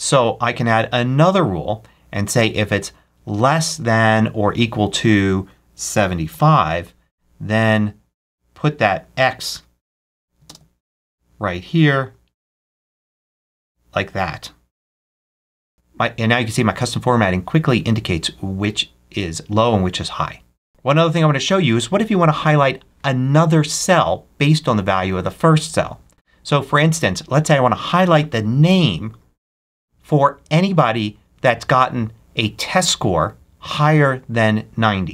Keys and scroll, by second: 5.9 7, 6.2 5, 9.8 Left, 10.3 ctrl+super+space, 13.3 space.